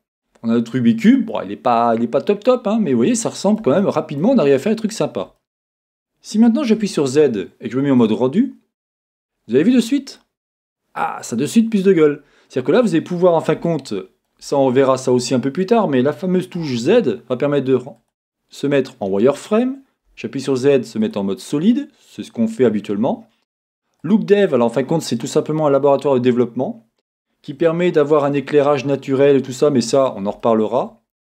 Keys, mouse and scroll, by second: 0.0 scroll down 2, 0.2 middle click, 0.2 scroll up 2, 1.2 scroll down 2, 1.3-6.8 middle drag, 2.7 scroll down 1, 4.2 scroll up 2, 4.4 scroll down 1, 4.5-5.3 scroll down 2, 5.3-6.8 scroll up 3, 6.8 scroll down 1, 6.8 z, 8.1 middle click, 8.2 middle click, 9.1-10.2 scroll up 3, 9.6 middle click, 10.2-16.6 middle drag, 12.0-13.6 scroll down 2, 16.6 z, 25.5 middle click, 26.5-27.8 middle drag, 28.0 middle click, 28.5-31.2 middle drag, 28.5-28.9 scroll down 2, 31.1-31.2 scroll up 3.